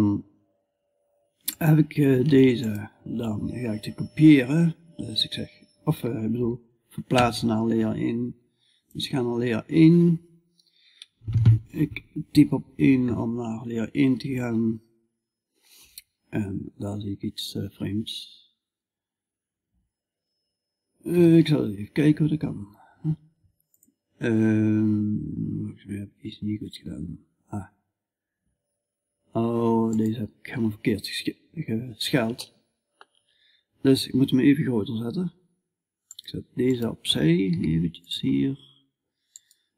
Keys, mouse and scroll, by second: 10.7 1, 13.3-17.5 middle drag, 17.6-20.6 middle drag, 20.6 g, 23.8-36.9 middle drag, 36.9-39.7 right drag, 36.9 g.